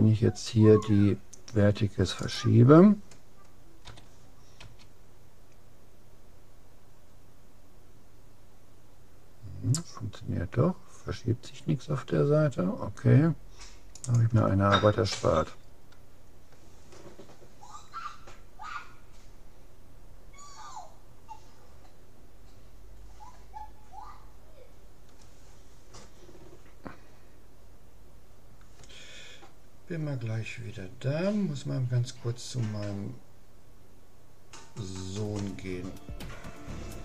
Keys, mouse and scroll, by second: 2.4-4.0 right drag, 3.8 g, 4.2 click, 15.1 a, 15.8-17.6 middle drag.